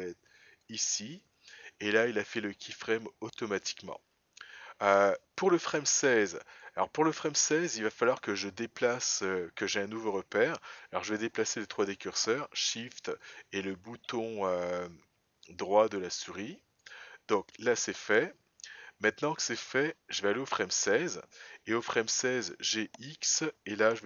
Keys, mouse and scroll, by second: 5.4-10.1 drag, 13.2 shift+right click, 19.7 click.